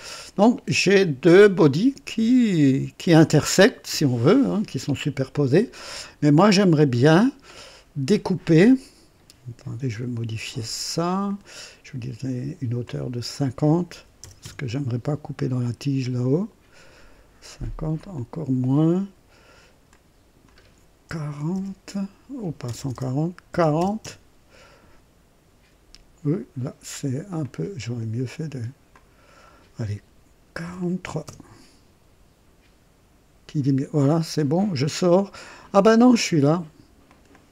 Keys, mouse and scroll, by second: 0.7-2.1 drag, 4.7-9.4 drag, 11.0 click, 12.8 click, 14.0 KP_5, 14.2 KP_0, 14.4 KP_Enter, 17.9 click, 19.8 click, 21.1 KP_1, 21.3 KP_4, 21.5 KP_0, 22.6 BackSpace, 23.5 KP_4, 23.7 KP_0, 24.0 Return, 27.2 click, 28.9 click, 30.6 KP_4, 31.0 KP_3, 31.4 Return, 34.1-36.5 drag, 37.1 click.